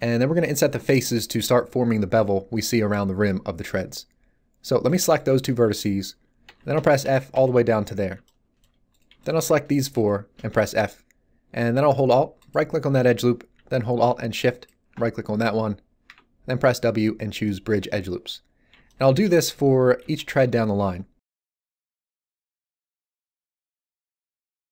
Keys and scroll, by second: 6.4 f, 10.5 f, 16.0 w.